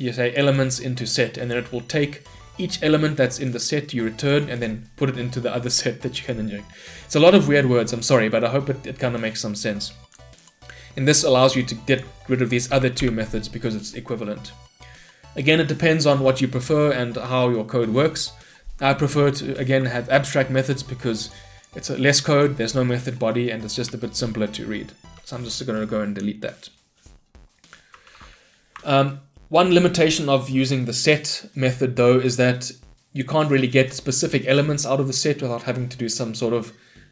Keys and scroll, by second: 12.8 Delete, 19.1 ctrl+z, 23.9 Delete, 28.1 ctrl+alt+l, 28.8 Escape.